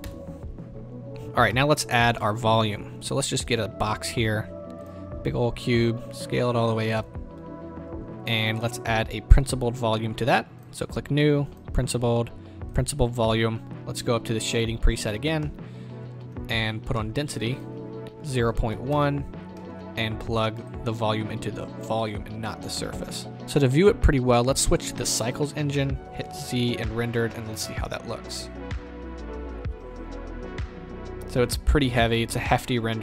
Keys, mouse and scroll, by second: 0.0 KP_0, 1.1 z, 1.5-4.8 middle drag, 1.8-2.1 scroll down 2, 2.1 scroll up 2, 2.4-3.1 scroll down 2, 3.1-4.8 scroll down 1, 5.1-5.5 scroll down 2, 5.5 s, 6.9 KP_0, 10.6 click, 12.7-14.7 drag, 18.9-22.4 drag, 19.1 KP_Enter, 23.4-33.0 drag, 27.0 z.